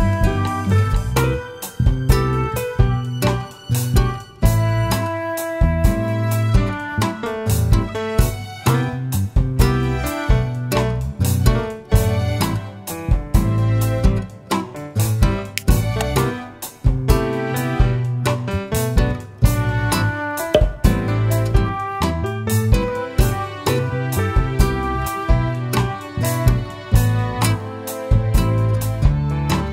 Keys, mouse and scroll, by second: 0.3 click, 0.7 scroll down 1, 1.7 scroll up 1, 2.5 click, 3.0 middle drag, 5.8-8.5 middle drag, 5.8-6.6 scroll down 2, 8.5-14.0 drag, 14.5-15.3 scroll up 2, 15.3 middle drag, 15.6-18.1 middle drag, 16.8 shift+a, 18.1 Escape, 18.6 ctrl+a, 21.0 click, 21.8 click, 22.3 scroll up 1, 23.1 Tab, 24.7 2, 25.3 click, 26.6 shift+click, 27.8 shift+click, 28.4-29.7 middle drag.